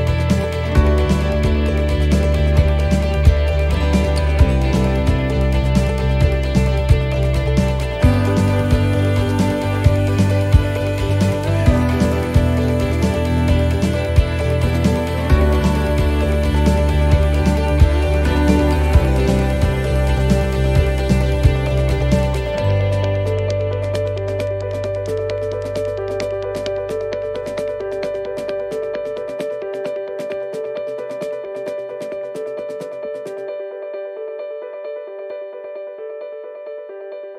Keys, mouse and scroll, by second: 0.6 alt+shift+right click, 1.5 alt+shift+right click, 1.9 middle click, 3.2 alt+shift+right click, 4.5 shift+middle click, 5.2-5.7 scroll down 1, 5.8 middle click, 9.9-10.3 scroll down 3, 10.2 middle click, 12.8 click, 14.9 click, 14.9 middle click, 15.3-15.6 scroll up 4, 16.2 shift+middle click, 17.7 right click, 18.4 alt+shift+right click, 19.3 right click, 20.3 middle click, 24.9 middle click, 25.9 scroll up 1, 28.4 alt+shift+right click, 30.7 middle click, 32.0 shift+middle click, 32.8 middle click, 34.2 alt+shift+right click, 35.1 alt+shift+right click.